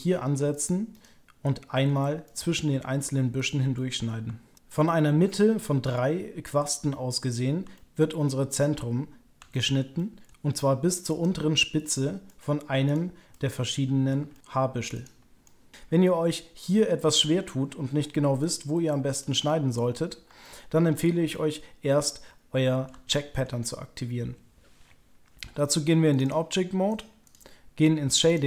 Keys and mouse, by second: 0.5 ctrl+click, 0.9 ctrl+click, 2.2 middle click, 3.7 click, 4.6-7.6 middle drag, 7.7 shift+click, 8.0-9.3 middle drag, 9.5 shift+middle click, 9.9 middle click, 11.0 ctrl+click, 12.2 middle click, 13.3 middle click, 13.7 click, 14.3 shift+click, 14.9 ctrl+click, 15.4-17.3 drag, 18.4 click, 19.1 click, 19.4 middle click, 20.4 shift+click, 21.3-22.8 middle drag, 23.1 shift+middle click, 26.4 drag, 27.2 drag.